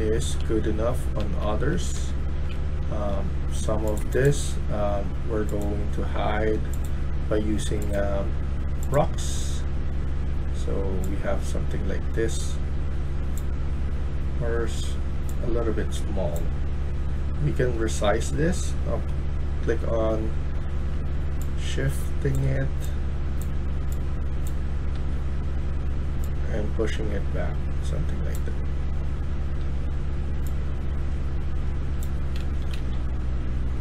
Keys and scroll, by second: 0.0-0.4 typing, 1.7-2.5 typing, 17.6 Tab, 29.5 Tab, 32.1-33.1 typing.